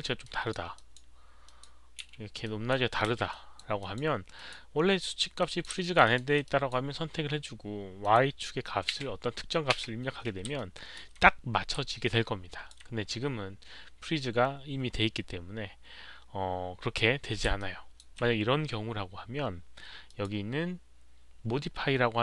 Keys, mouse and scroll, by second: 0.2-0.5 alt+drag, 0.7 alt+click, 1.4 alt+drag, 2.4 alt+drag, 2.7 w, 3.0 z, 3.3 drag, 3.8 drag, 4.3 drag, 5.4 drag, 5.8 alt+drag, 6.0 alt+right click, 6.4 alt+click, 7.7-8.9 typing, 8.0 alt+click, 8.0 alt+right click, 9.7 Return, 10.5 alt+click, 11.8 alt+click, 15.2 alt+click, 16.2 Return, 16.2 alt+right click, 16.2 1, 17.5-17.9 alt+drag, 20.0 alt+click.